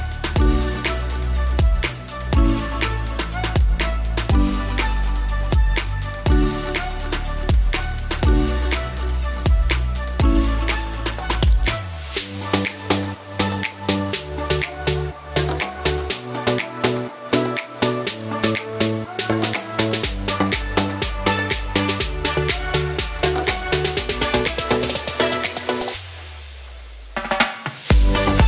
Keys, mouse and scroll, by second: 22.2 ctrl+z.